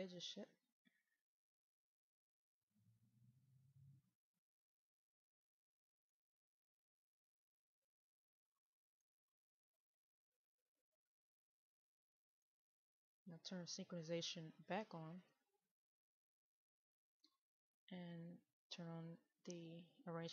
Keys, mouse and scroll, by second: 1.1 click, 1.4 right click, 2.0 click, 3.1 right click, 3.7 click, 4.7 right click, 5.1 click, 5.7 middle click, 7.1 click, 7.3 right click, 7.9 click, 8.5 middle click, 9.5-10.8 scroll up 1, 11.6 middle click, 15.0-20.3 drag.